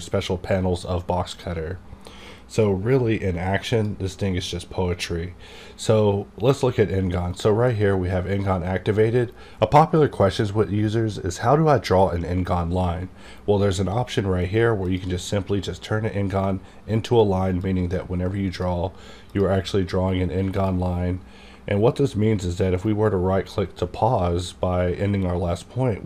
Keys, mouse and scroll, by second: 3.7 click, 16.6 click, 17.6-20.6 drag, 22.8 right click.